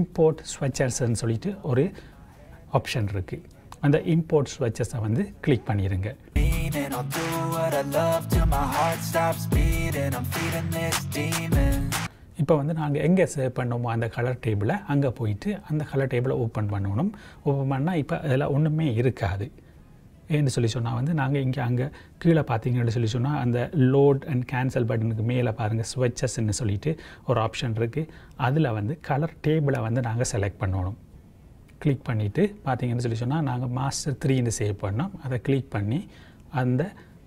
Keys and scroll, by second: 25.2 j.